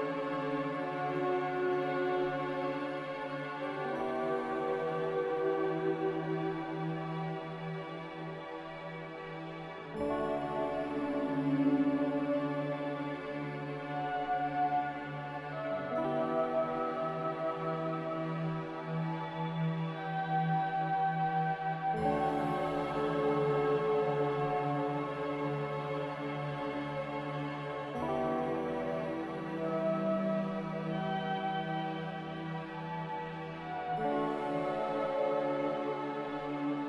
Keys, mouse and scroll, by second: 1.5 ctrl+z, 2.3 ctrl+z, 8.2 z, 10.0-10.8 typing, 25.6-26.5 typing.